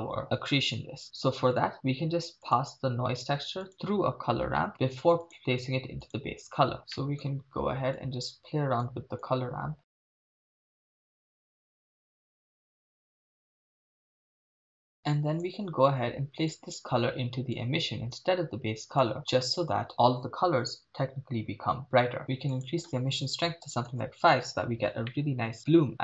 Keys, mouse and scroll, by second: 1.0-1.6 middle drag, 2.5 click, 3.4 shift+a, 6.8 scroll up 2, 6.9 middle click, 8.0-8.9 drag, 9.2-9.9 drag, 10.0 click, 10.3 drag, 10.5 click, 11.7 click, 12.8 click, 14.2 click, 14.4 click, 15.0 click, 16.5-17.8 drag, 19.0 click, 22.2 middle click, 22.5-23.9 drag, 25.2-25.7 middle drag.